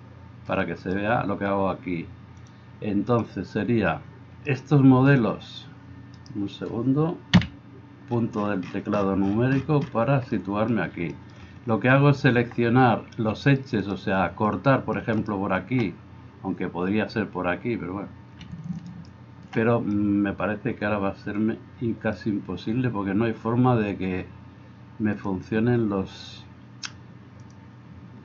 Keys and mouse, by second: 0.8 click, 5.1-7.4 drag, 6.2-9.3 right drag, 7.4 KP_Decimal, 9.3-25.2 drag, 15.2-18.4 middle drag, 15.2-18.4 right drag, 18.9 alt+middle click, 18.9 alt+right click, 25.2-27.5 middle drag, 27.5-28.2 drag.